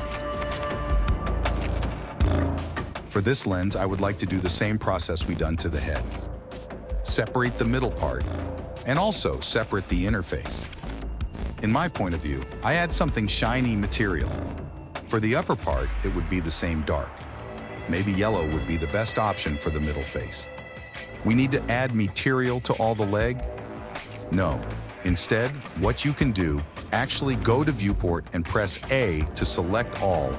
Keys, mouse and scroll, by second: 0.2 click, 1.2 click, 2.9 click, 3.5 middle click, 3.5 /, 4.2 Tab, 5.2 alt+click, 5.9 ctrl+KP_Add, 6.1 ctrl+KP_Add, 6.8 p, 7.3 click, 7.9 click, 8.4 ctrl+KP_Add, 8.5 ctrl+KP_Add, 8.7 ctrl+KP_Add, 8.8 ctrl+KP_Add, 9.1 p, 9.4 Tab, 9.9 drag, 10.4 click, 12.0 click, 13.4 click, 14.1 click, 15.7 click, 16.5 click, 17.7 click, 19.8 /, 20.7 click, 23.6 n, 26.9-28.1 drag, 28.1 KP_7.